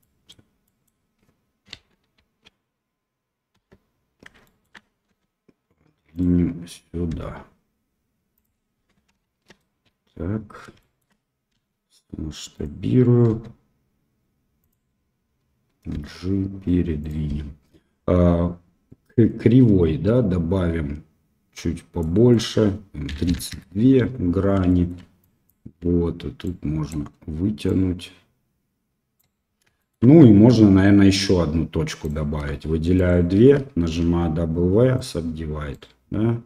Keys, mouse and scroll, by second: 0.6 middle click, 1.7 KP_1, 2.1 KP_3, 3.5 KP_1, 4.4 shift+click, 5.0 r, 7.1 g, 9.1 KP_1, 10.7 shift+click, 11.5 s, 13.3 r, 15.9 g, 22.3-24.0 drag, 24.6 shift+middle click, 25.2 click, 26.4 click, 27.6-29.1 drag, 29.7 shift+click, 32.0 click, 32.9 shift+click, 34.0 w, 35.7-36.4 drag.